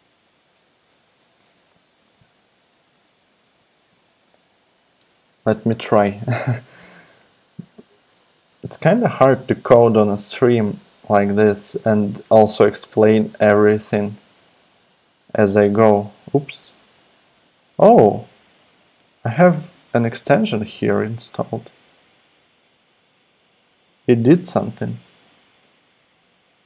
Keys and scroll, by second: 0.9 super+a, 5.0 shift+Tab, 16.8 super+a.